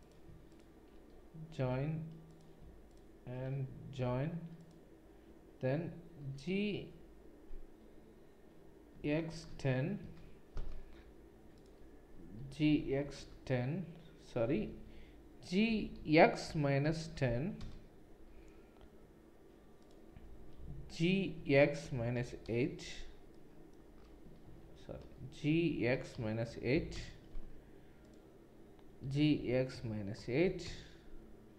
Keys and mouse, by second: 0.5 click, 0.5 middle click, 1.6 j, 4.0 j, 4.6 click, 4.6 middle click, 6.2 g, 11.5 click, 11.5 middle click, 12.5 g, 15.6 g, 19.8 click, 19.8 middle click, 21.0 g, 24.5 ctrl+z, 25.5 g, 29.0 g.